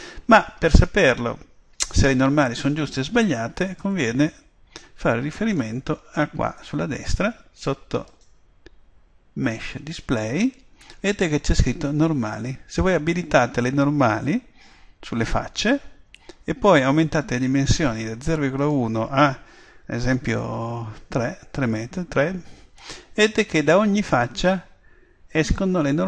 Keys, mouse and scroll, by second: 3.8 click, 8.1 click, 13.1 click, 18.6 click, 23.5-25.2 middle drag.